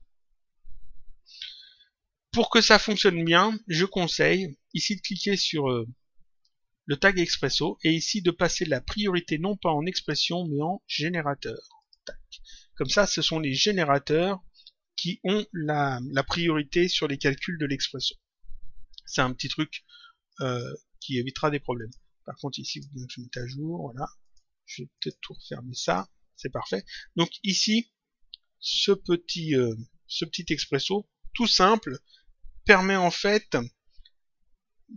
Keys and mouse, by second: 4.7 click, 9.9 click, 11.7 click, 20.2 click, 21.7 click, 24.2 click.